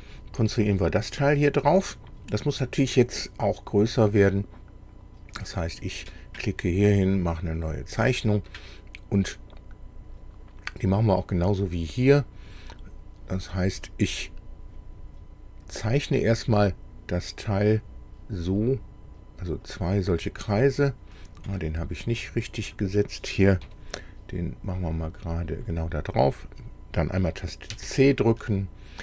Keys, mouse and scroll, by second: 5.4 click, 7.5 click, 10.0 scroll up 2, 15.7 click, 17.7 click, 19.7 click, 21.1 scroll up 1, 21.5 click, 22.7 click, 23.6 Delete, 24.8 click, 25.6 click, 27.7 c, 28.4-28.7 scroll down 2.